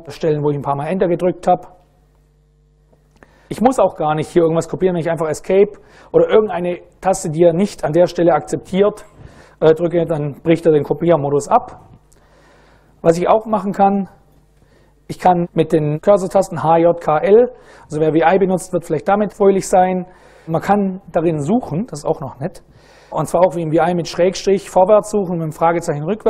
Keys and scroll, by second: 0.0 Down, 0.1 Left, 0.5 Left, 2.2 Down, 2.5 Down, 3.5 Up, 5.1 Escape.